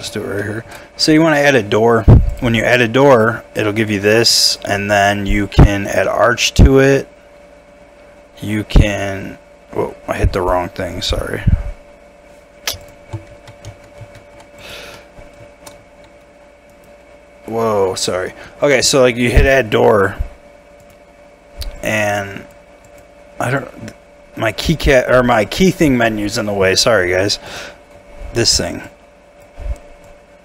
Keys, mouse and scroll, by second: 0.1 middle click, 0.4 shift+middle click, 3.1 middle click, 3.5 scroll up 1, 3.9 middle click, 13.3 ctrl+z, 13.7 ctrl+z, 14.0 ctrl+z, 14.9 middle click, 15.8 shift+middle click, 16.7 right click, 19.4 middle click.